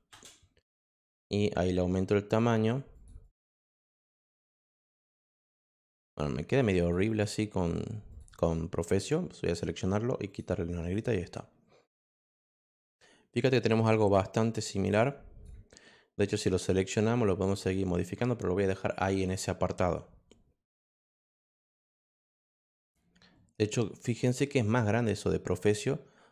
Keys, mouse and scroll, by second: 0.1 Return, 2.9 click, 3.2 click, 4.8 click, 6.0 click, 6.5 click, 6.7 click, 7.0 click, 8.1 click, 8.9 click, 10.2 click, 10.8 click, 14.4 click, 15.0 click, 17.6 click, 23.9 click, 25.2 click.